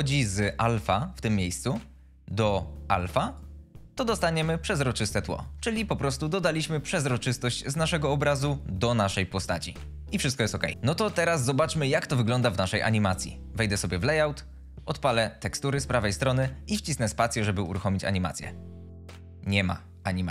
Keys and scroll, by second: 17.7 space.